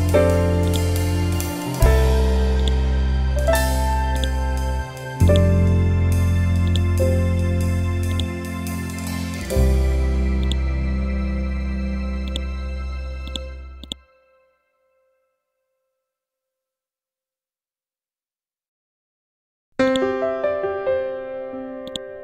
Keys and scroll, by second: 16.0 F12, 17.3 5, 17.7 Return.